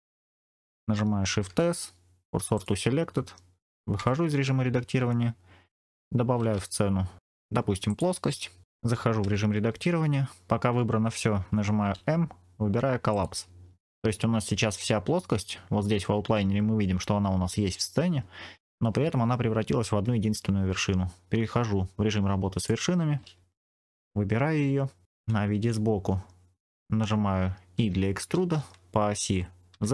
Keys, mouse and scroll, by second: 1.4 shift+s, 3.9 Tab, 6.3 shift+a, 9.1 Tab, 11.8 m, 14.2-14.9 scroll up 4, 22.4 click, 23.8 click, 24.9 scroll down 2, 25.8 KP_1, 27.7 e, 29.6 z.